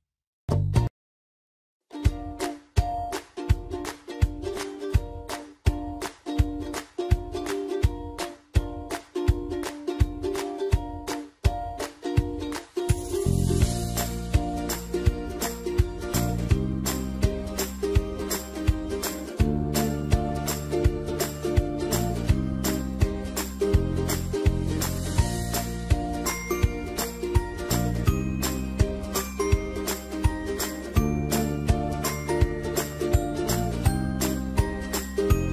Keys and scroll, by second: 7.6 ctrl+d, 31.9-33.2 typing.